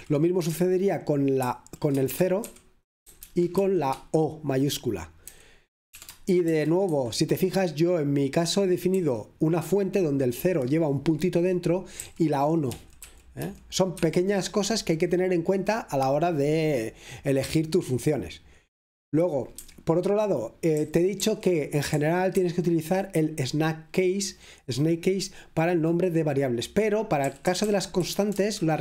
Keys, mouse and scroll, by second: 0.0 typing, 3.0-3.8 typing, 5.4-7.0 typing, 9.1 k, 12.1-14.5 typing, 16.0-17.4 scroll down 1, 17.4-19.2 scroll down 1, 19.2 scroll down 1, 19.7 Escape, 21.2 typing, 22.4-23.3 typing, 27.3-28.8 typing.